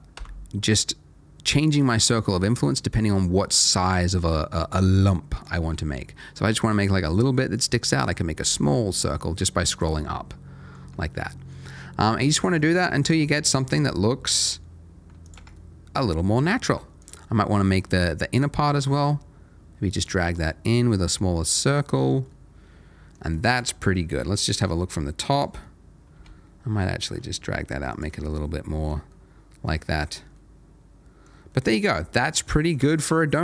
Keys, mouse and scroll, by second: 0.1 g, 0.9-2.2 scroll up 1, 2.2-3.1 scroll down 1, 3.1 right click, 3.8 click, 4.1 middle click, 5.6 g, 6.3-8.0 scroll up 1, 8.0 right click, 8.4 g, 9.7 click, 9.9 middle click, 10.8 Tab, 11.0 middle click, 12.3 middle click, 13.0 click, 13.2 middle click, 13.8 g, 14.0 scroll down 1, 15.2 click, 15.4 Tab, 15.5 middle click, 17.0 click, 17.2 middle click, 17.8 g, 19.9 click, 20.2 Tab, 20.4 middle click, 21.8 middle click, 23.7 scroll down 1, 24.0 middle click, 24.7 Tab, 25.3 click, 26.1 g, 26.5-27.9 scroll down 1, 27.9 click, 28.0 Tab, 28.5 middle click, 32.9 shift+middle click, 33.1 scroll up 1.